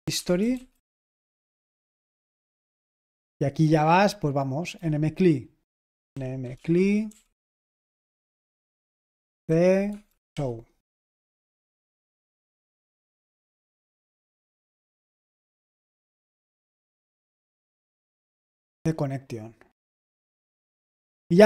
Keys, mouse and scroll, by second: 0.0-2.6 typing, 4.7 typing, 5.8-7.0 typing, 9.4-10.7 typing, 13.3 ctrl+p, 14.4 ctrl+n, 14.9-17.0 typing, 18.7-21.4 scroll up 1.